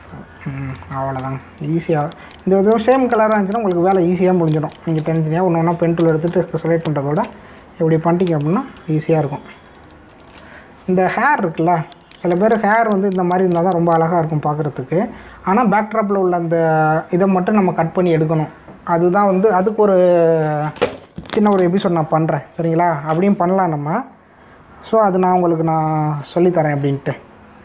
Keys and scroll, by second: 0.6 Return, 0.8 Delete, 1.8 ctrl+d, 2.2 space, 6.0 ctrl+alt+d, 7.0 Return, 7.2 Delete, 8.2 ctrl+d, 9.6 ctrl+-, 10.6 ctrl+=, 11.5 space.